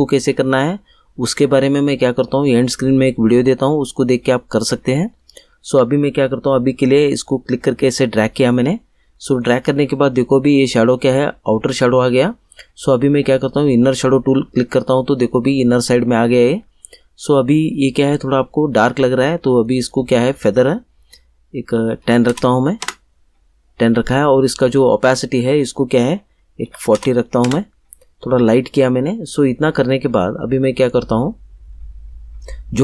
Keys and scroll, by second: 22.0 1, 22.2 0, 22.8 Return, 26.6 4, 26.9 0, 27.4 Return.